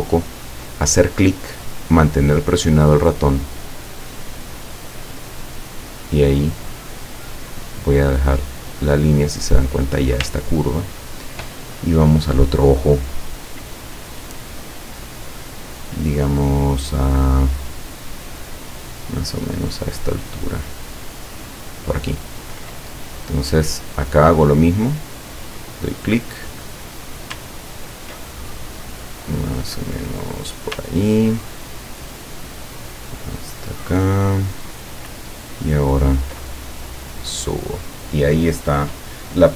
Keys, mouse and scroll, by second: 3.4 click, 8.6 click, 22.3 ctrl+click, 25.0 click, 30.6 ctrl+click, 34.5 ctrl+click, 36.8 ctrl+click.